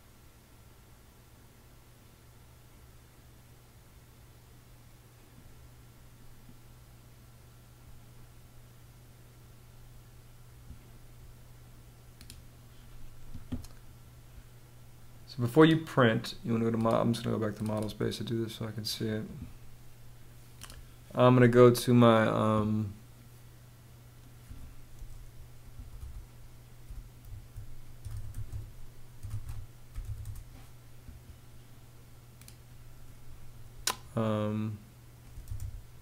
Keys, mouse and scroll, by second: 25.2-30.0 typing, 34.7-36.0 typing.